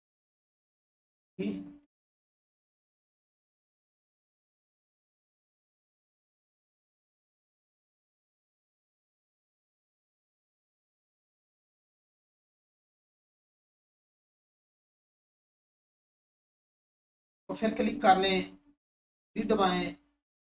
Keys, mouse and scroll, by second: 1.8 click, 5.3 right click, 8.1 click, 11.7 click, 12.2 1, 14.3 alt+click, 19.1 3, 19.7 click.